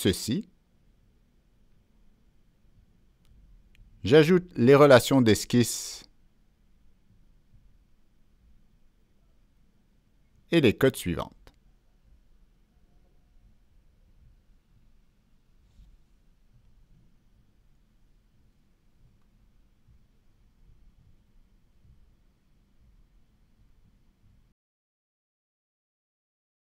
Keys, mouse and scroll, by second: 0.7 ctrl+click, 1.3 ctrl+click, 3.0 click, 5.7 scroll down 1, 7.1 click, 7.9 ctrl+click, 9.2 click, 9.9 right click, 10.2 ctrl+click, 11.7 click, 12.8 click, 12.8 right click, 13.3 click, 14.9 Down, 15.2 Return, 15.6 Return, 16.7 middle click, 16.8-17.2 scroll down 2, 17.1 Return, 17.1 click, 17.1 scroll up 1, 17.6 scroll down 1, 19.0 Return, 19.8 click, 21.3 click, 22.7 click, 23.9 click, 24.9 click, 26.2 click.